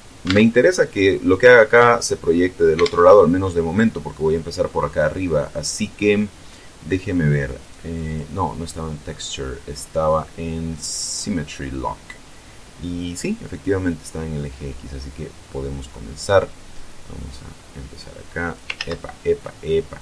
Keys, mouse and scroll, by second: 0.1 alt+Tab, 2.6 alt+Tab, 4.4-4.9 scroll down 2, 7.4 click, 7.9 click, 9.3-9.7 scroll down 1, 10.4 middle click, 10.6 click, 11.0-11.4 scroll down 1, 16.6-18.6 drag, 18.6 ctrl+z.